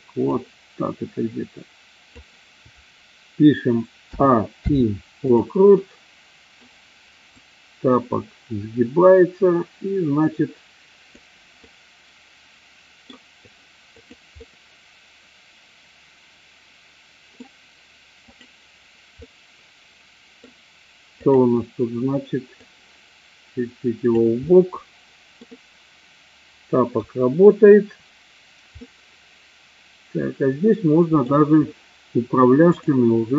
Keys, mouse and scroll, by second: 0.2-2.1 drag, 4.0 a, 4.6 i, 5.7-6.6 middle drag, 7.2-11.1 drag, 11.6-13.1 middle drag, 13.9 click, 14.4-17.4 middle drag, 19.1-20.4 middle drag, 21.2 click, 22.7-24.1 drag, 24.5-27.0 middle drag, 28.8-31.2 middle drag, 32.6 click.